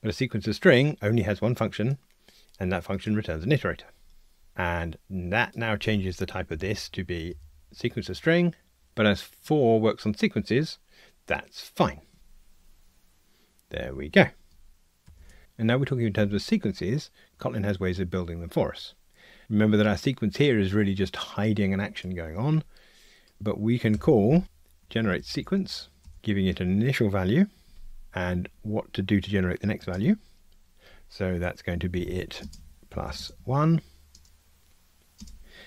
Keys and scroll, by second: 6.5 alt+Return, 12.2 ctrl+r, 26.1 Return.